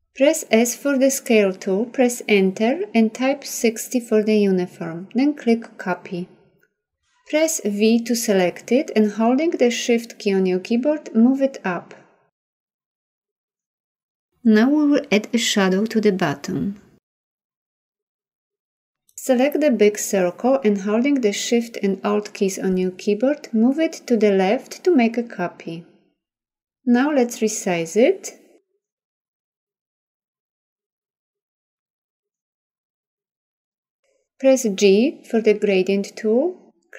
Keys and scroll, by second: 0.0 s, 1.4 Return, 8.1 v, 34.2 g.